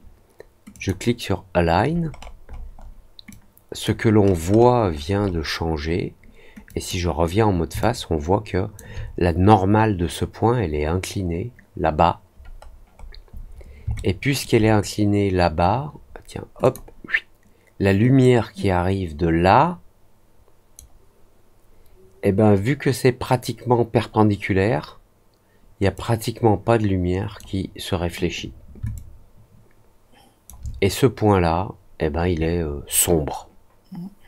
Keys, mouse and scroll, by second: 0.7 click, 2.1 middle click, 2.4 middle click, 2.7 middle click, 3.2 click, 4.1 middle click, 4.5 middle click, 4.8 middle click, 5.1 middle click, 6.6 click, 7.7 alt+click, 12.6-13.0 scroll down 2, 13.0 scroll up 1, 13.3 scroll down 1, 13.9 alt+middle click, 16.5 click, 18.1-20.7 drag, 25.9-27.3 drag, 28.9-30.4 alt+drag.